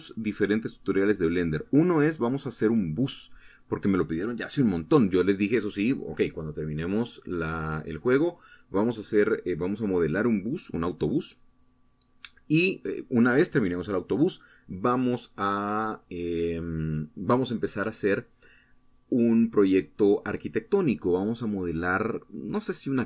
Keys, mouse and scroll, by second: 0.0 Up, 7.1 Escape, 13.0 ctrl+s, 13.9 Return.